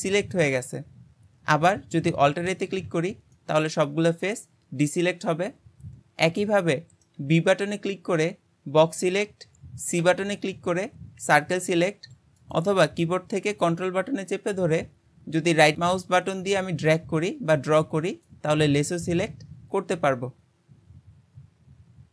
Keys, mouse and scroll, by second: 2.5 alt+a, 3.3-6.5 middle drag, 14.7 ctrl+right click, 19.2-22.1 middle drag.